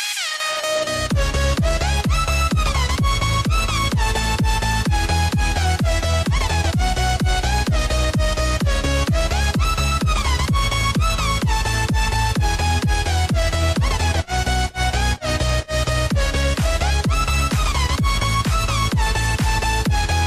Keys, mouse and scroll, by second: 0.7 click, 1.7 scroll up 2, 2.4 shift+a, 5.5 r, 9.5 s, 12.0 click, 14.1 s, 16.7 click, 17.8-18.1 scroll down 1, 19.0 KP_1.